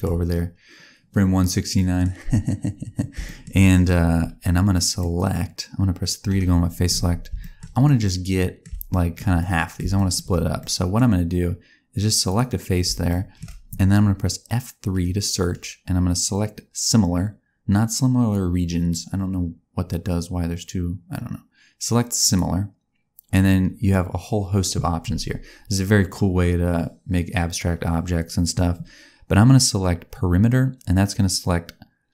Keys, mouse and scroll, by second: 0.1-1.7 scroll down 1, 1.7 middle click, 3.2 shift+middle click, 3.5 middle click, 4.7 middle click, 6.2 3, 7.3 shift+middle click, 7.8 middle click, 8.8 shift+middle click, 9.3 middle click, 9.9 shift+middle click, 10.5 middle click, 12.2 click, 13.0 shift+middle click, 14.8 middle click.